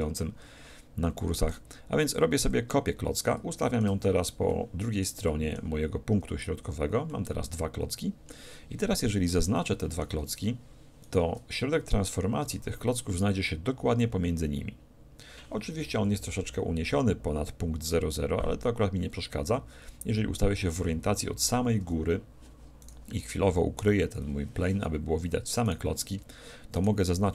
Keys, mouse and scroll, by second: 1.5-3.2 drag, 3.1-7.0 middle drag, 6.6 z, 7.1-8.7 middle drag, 8.8 middle click, 11.0 middle click, 11.0-12.8 right drag, 16.0 KP_1, 21.8 KP_7, 22.8-24.6 right drag, 23.8 h, 25.6-27.3 right drag.